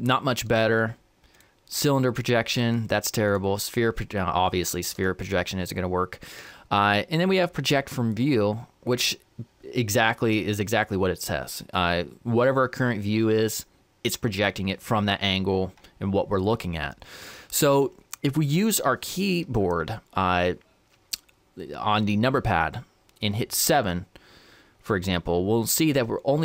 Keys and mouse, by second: 0.7 u, 2.7 u, 5.0 u, 23.6 KP_7.